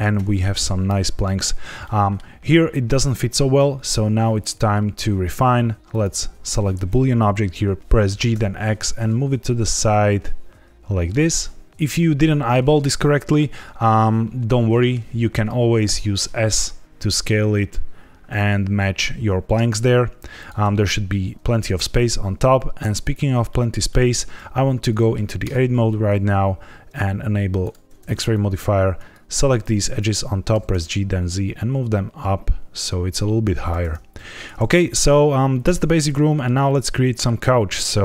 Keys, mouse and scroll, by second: 0.9 middle click, 1.8 middle click, 5.8 click, 7.8 Escape, 7.8 g, 8.0 g, 8.3 x, 11.7 click, 11.7 middle click, 14.6 middle click, 15.0-15.8 scroll down 1, 15.8 s, 20.3 right click, 23.4 shift+middle click, 23.8 middle click, 24.9 middle click, 25.4 Tab, 27.6 click, 28.2 click, 29.5 click, 30.5 g, 30.6 z, 33.6 click, 33.8 Tab, 34.1 z, 34.8 click, 35.5 middle click, 36.2 shift+middle click, 36.7 middle click.